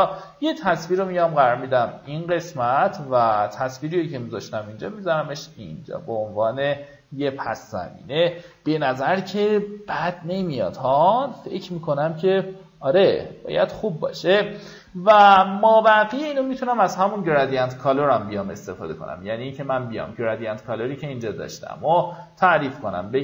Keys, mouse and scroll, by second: 1.0 alt+click, 3.7-5.2 drag, 5.5 shift+click, 9.6-11.2 alt+drag, 12.8-13.4 alt+scroll up 2, 14.4-17.7 alt+scroll down 1, 17.7 click.